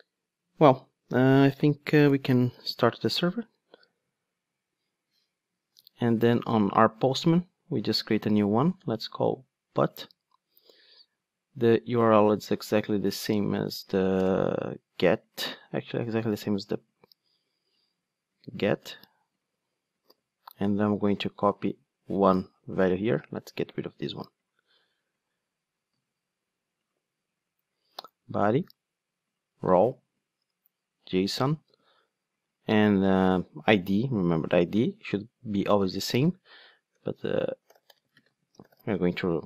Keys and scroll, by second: 3.0 ctrl+d.